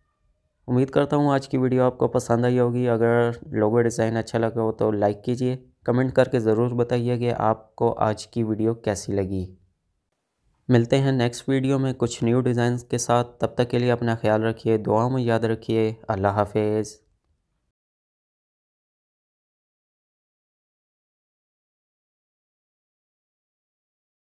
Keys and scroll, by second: 0.9 space.